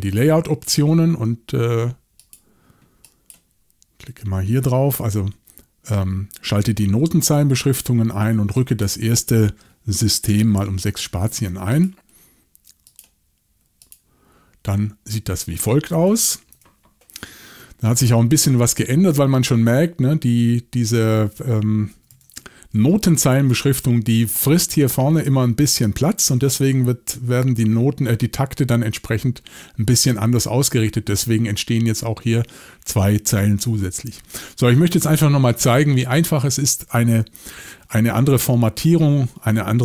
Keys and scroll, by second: 10.5 6, 15.9-16.5 typing, 22.0-22.4 typing.